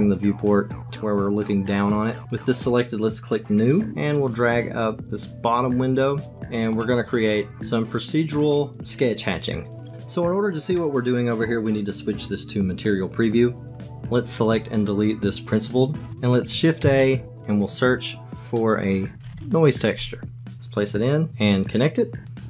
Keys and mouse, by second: 3.5 click, 4.2-6.3 drag, 6.3 middle click, 7.5 shift+click, 13.3 click, 14.5 click, 16.1 Delete, 16.2 click, 16.8 shift+a, 21.3 click.